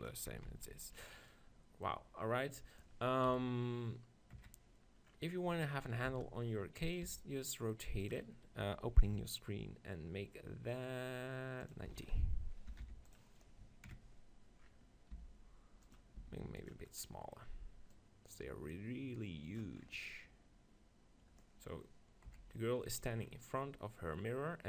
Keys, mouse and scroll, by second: 0.6 ctrl+z, 1.0-3.3 middle drag, 3.3 KP_1, 4.4 KP_3, 6.1 shift+d, 7.0-9.9 drag, 7.1 r, 9.1 n, 9.9 middle click, 11.6-13.5 drag, 14.6 middle click, 15.2 g, 16.2 s, 16.7 click, 22.3 KP_1, 23.3-24.6 middle drag.